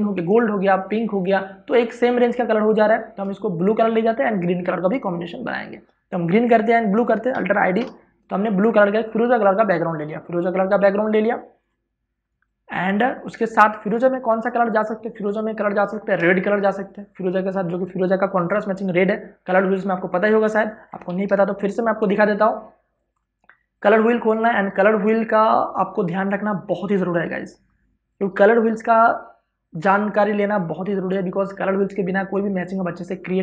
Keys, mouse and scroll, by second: 0.7 click, 7.5 Return, 8.9-9.7 scroll down 1, 9.7 click, 13.5 space, 13.7 ctrl+click, 14.7 click, 20.9 ctrl+o, 22.9 click.